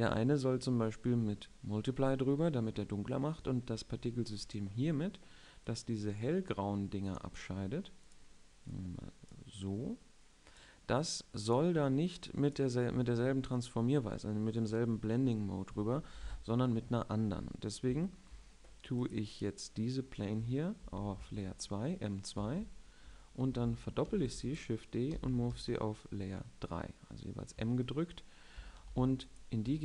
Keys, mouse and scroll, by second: 5.3-6.4 middle drag, 6.4-9.1 right drag, 9.1 click, 12.5-13.9 drag, 19.7-21.7 drag, 21.5 m, 23.3 shift+2, 24.8 shift+d, 25.9 m, 29.3 shift+3.